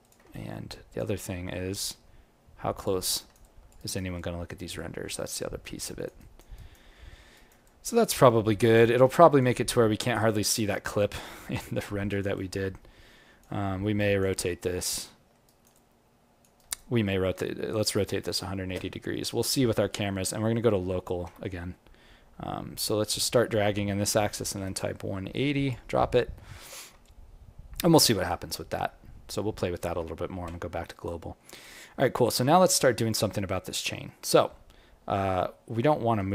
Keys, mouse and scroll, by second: 0.0 g, 0.3 alt+click, 1.9 g, 3.1 alt+right click, 3.4 alt+click, 3.7 alt+right click, 4.1 alt+click, 5.0 alt+middle click, 5.4 alt+click, 6.1 alt+right click, 6.9 alt+middle click, 7.3 alt+right click, 7.6 alt+click, 8.3 alt+middle click, 8.6 alt+right click, 8.9 alt+click, 9.6 alt+middle click, 9.9 alt+right click, 10.1 alt+click, 11.8 alt+middle click, 12.1 alt+right click, 12.3 alt+click, 13.6 alt+middle click, 13.9 alt+right click, 14.3 alt+click, 15.0 alt+middle click, 15.4 alt+right click, 15.7 alt+click, 16.5 alt+right click, 17.7 space, 19.9 alt+q, 27.0 alt+click, 27.9 alt+middle click, 28.2 alt+right click, 28.5 alt+click, 29.9 alt+q, 30.8 alt+right click, 31.3 alt+middle click, 31.6 alt+right click, 32.0 alt+click, 33.0 click, 33.5 ctrl+middle click, 34.0 alt+middle click, 36.0 g.